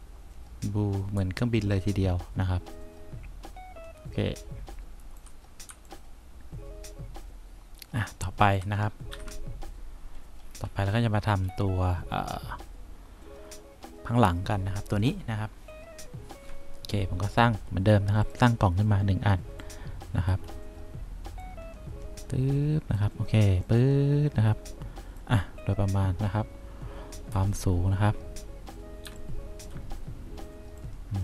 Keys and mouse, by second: 1.3 2, 5.8 3, 9.2 F2, 19.8 click, 21.9-23.1 drag, 27.5 F3, 29.2 1.